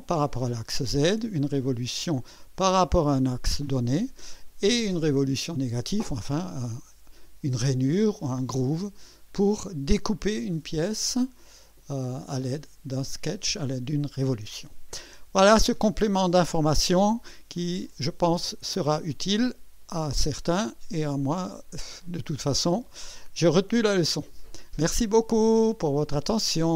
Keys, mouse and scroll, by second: 19.8 right click.